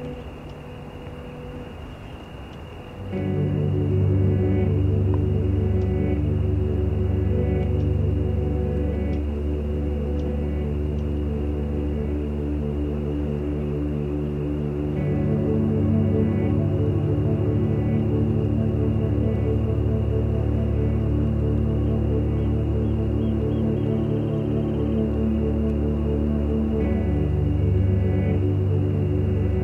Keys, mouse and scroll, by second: 0.3-2.8 shift+drag, 7.2 shift+click, 8.3-9.7 shift+drag, 10.8 shift+click, 13.4 shift+click, 13.5 shift+F1, 13.7 shift+KP_Subtract, 15.0 click, 16.2 click, 17.0 KP_Add, 17.7 click, 18.0 click, 18.8 click, 19.2 F6, 19.4 click, 20.9 shift+click, 21.6 ctrl+z, 22.7 shift+click, 23.3 shift+click, 23.7 shift+click, 25.5 shift+click, 25.8 shift+click, 26.7 ctrl+shift+z, 27.4 ctrl+shift+click, 27.7 ctrl+shift+click, 28.9 ctrl+shift+click.